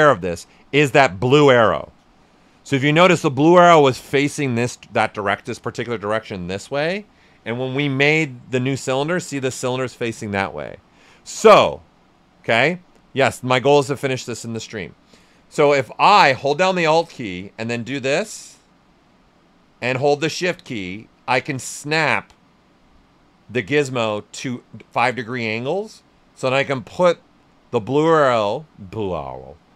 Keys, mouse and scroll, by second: 0.3 right click, 7.7 ctrl+shift+Num_Lock, 7.7 right click, 8.0 ctrl+shift+z, 12.3 ctrl+z, 12.7 right click, 16.3 right click, 17.3-26.9 alt+drag, 26.9 shift+right click.